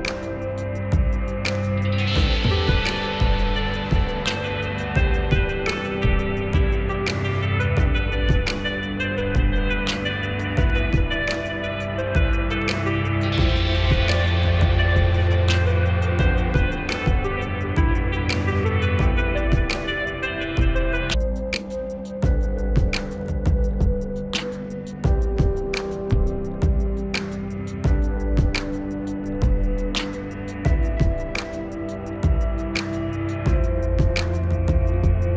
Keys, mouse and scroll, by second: 0.9 shift+Page_Up, 1.6-5.0 drag, 5.0 shift+Page_Up, 5.8-8.2 drag, 8.2 shift+Page_Up, 9.0-14.5 drag, 14.5 shift+Page_Up, 15.5 click, 17.2 ctrl+u, 17.5-20.6 drag, 20.6 shift+Page_Up, 23.1-25.4 drag, 25.4 shift+Page_Up, 28.8 shift+Page_Up, 29.7-31.9 drag, 31.9 shift+Page_Up, 33.2-35.3 drag.